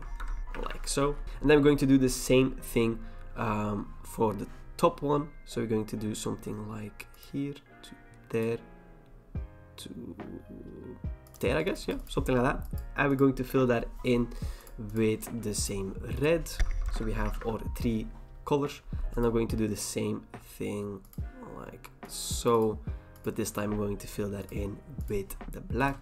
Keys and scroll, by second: 0.2 alt+BackSpace, 0.6 ctrl+d, 16.9 alt+BackSpace, 17.3 ctrl+d.